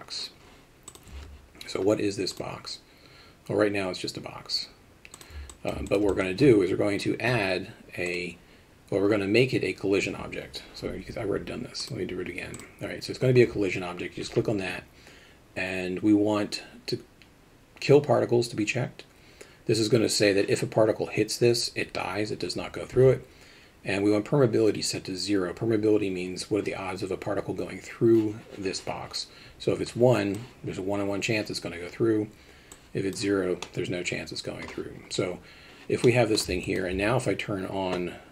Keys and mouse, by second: 2.4-5.2 drag, 5.5 alt+middle drag, 5.9 alt+shift+middle click, 6.1 alt+middle drag, 8.1 click, 29.9 click, 32.7 click, 33.6 middle click, 36.0 middle click, 36.6 alt+shift+middle click.